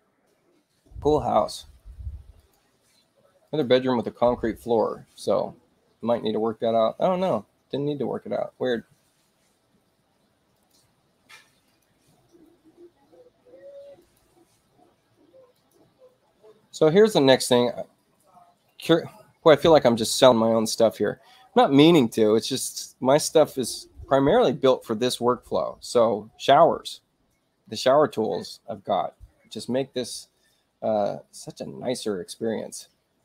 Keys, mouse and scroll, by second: 2.3 click, 3.3 click, 10.4 click, 11.6 click, 13.9 click, 15.4 click, 32.6 click.